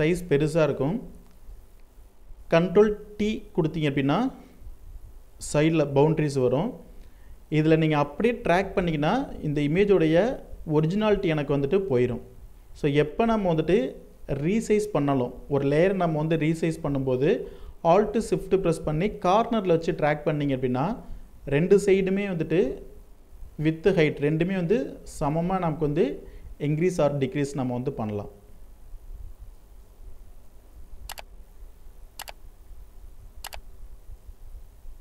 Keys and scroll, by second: 0.0 alt+space, 2.4 ctrl+t, 14.7 ctrl+t, 25.9 ctrl+t.